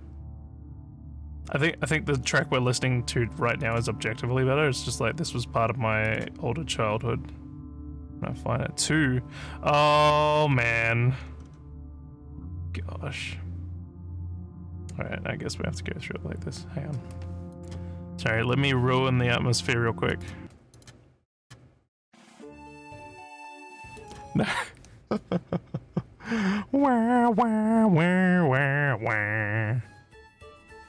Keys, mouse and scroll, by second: 0.0-0.4 scroll up 4, 2.4 scroll up 2, 3.6 click, 6.1 click, 10.2 scroll down 1, 10.7 scroll up 2, 11.2-11.5 scroll down 3, 14.1 scroll up 2, 17.5 click, 20.1 click, 20.7 click, 21.3 click, 23.9 click.